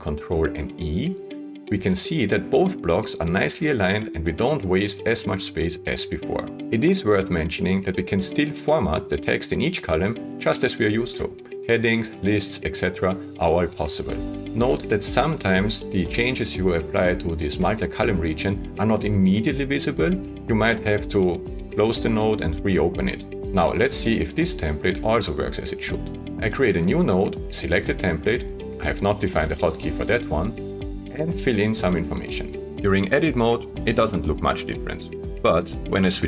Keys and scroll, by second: 0.3 ctrl+e, 27.2 alt+n.